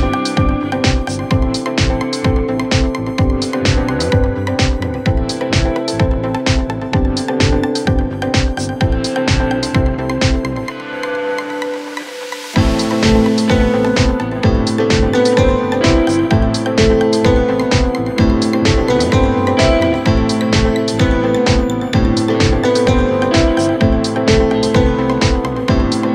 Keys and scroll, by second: 0.7 ctrl+z, 3.8 3, 9.8 f, 14.4 4, 16.3 2, 22.1 4, 23.2 2.